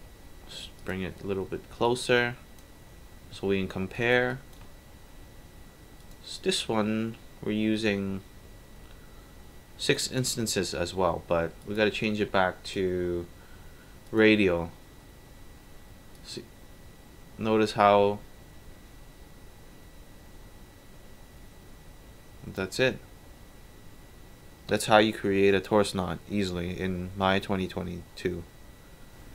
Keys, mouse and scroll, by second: 0.8 click, 1.9-2.6 drag, 3.7 alt+middle click, 4.0 alt+right drag, 4.3 alt+click, 6.0 alt+click, 6.9 scroll up 2, 11.6 click, 12.7 click, 14.0 click, 16.2-18.2 alt+drag.